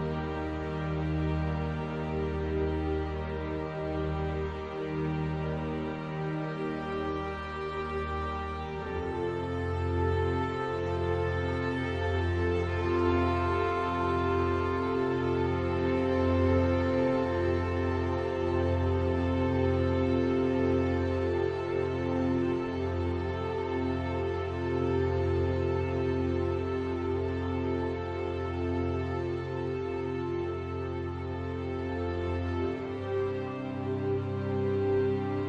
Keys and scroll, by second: 19.5 shift+F5.